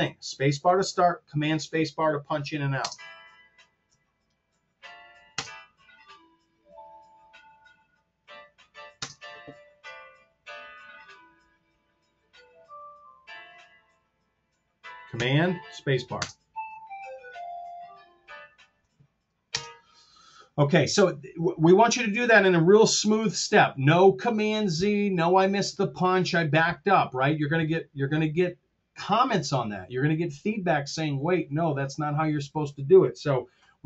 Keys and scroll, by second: 2.7 space, 5.4 super+space, 9.0 super+space, 16.2 super+space, 19.6 space.